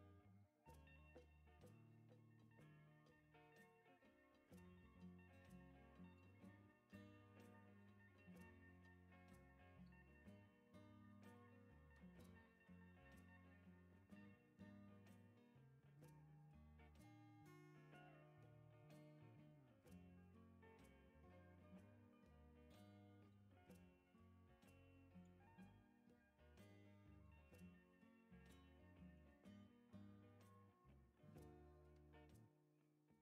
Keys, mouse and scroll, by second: 0.3 click, 1.5 ctrl+click, 2.3 click, 3.8 scroll up 2, 4.1 click, 5.4 scroll up 2, 6.1 click, 7.0 ctrl+click, 7.6 click, 8.7-9.2 scroll down 4, 9.5 scroll down 2, 9.9 right click, 10.5 scroll down 2, 10.7 right click, 11.4 scroll up 2, 12.3 click, 13.6 ctrl+click, 14.6 click, 15.7 right click, 16.1 click, 16.9 scroll up 2, 18.0 scroll up 2, 18.8 click, 19.0-19.5 scroll down 3, 20.6 ctrl+click, 21.6 click, 23.1-23.6 scroll down 4, 24.0-24.4 right drag, 24.7 right click, 25.2-26.0 scroll up 3, 26.6 scroll up 1, 27.3 click, 27.6 scroll up 2, 28.4 click, 29.5 click, 30.5 right click, 32.8 click.